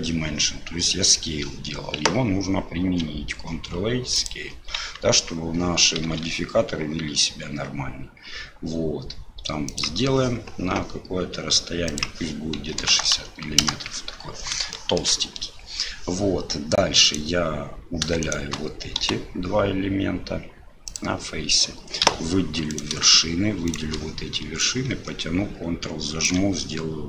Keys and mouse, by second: 2.8 ctrl+a, 5.0 Tab, 6.1 i, 11.9-14.4 drag, 14.8 shift+click, 17.0 right click, 18.2 shift+right click, 19.0 Delete, 22.0 1, 22.7 click, 23.7 shift+click, 24.6-26.2 drag.